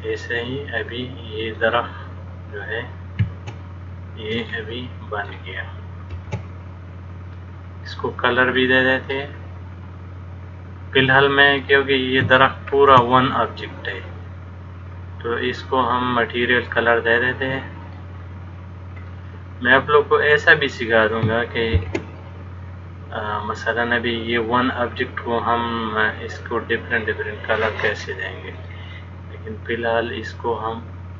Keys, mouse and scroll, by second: 4.6 shift+middle click, 6.3 shift+d, 9.4 middle click, 13.0 shift+d, 19.3 middle click, 22.0 shift+d, 28.7 click.